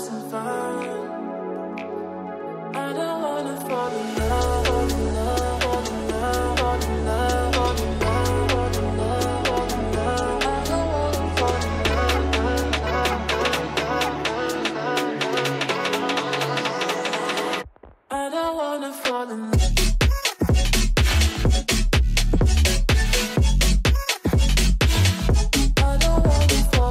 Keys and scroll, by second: 0.6-1.7 typing, 2.7 ctrl+space, 3.8 c, 4.2 shift+F2, 4.5 Escape, 10.2 c, 10.6 Escape, 10.8 F3, 14.8 F8, 15.0 BackSpace, 16.9 Caps_Lock, 17.3 w, 19.8 w, 20.3 e, 23.6 ctrl+space, 25.0 r, 25.4 Escape, 25.6 F3.